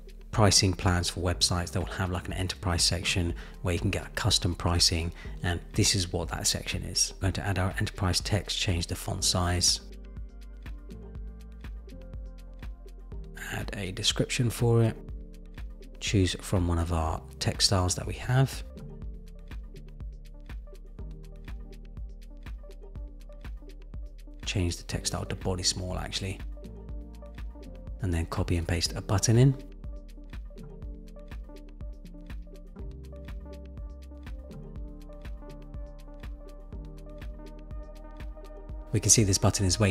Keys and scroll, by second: 31.0 super+v.